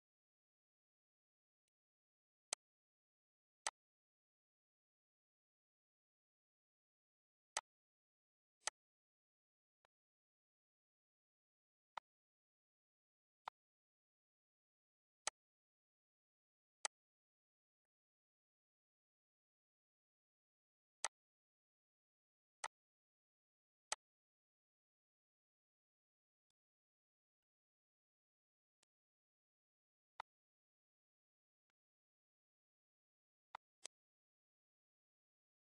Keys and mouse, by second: 1.1 click, 2.3 click, 3.5 click, 5.5 click, 6.8 click, 8.5 click, 9.9 click, 10.7 click, 13.7 click, 15.0 click, 16.0 click, 18.5 click, 19.3 click, 20.5 click, 21.3 click, 22.8 click, 24.3 click, 25.7 ctrl+s, 26.7 click, 28.6 click, 29.5 click, 30.5 click, 31.8 click, 33.1 click, 34.0 click.